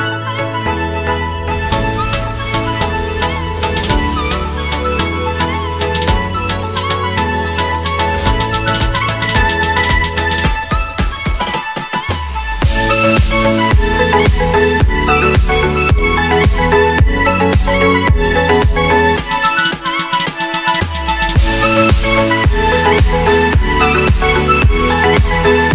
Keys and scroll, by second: 1.3 shift+F2, 11.4 F3, 20.2 ctrl+r.